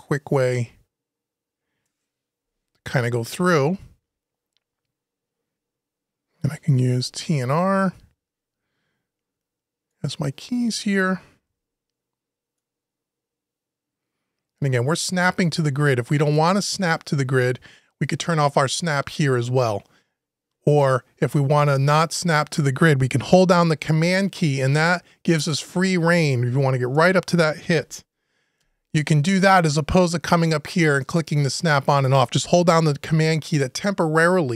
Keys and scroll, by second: 2.2 Delete, 11.2 Delete, 16.3 Delete, 28.4 Delete.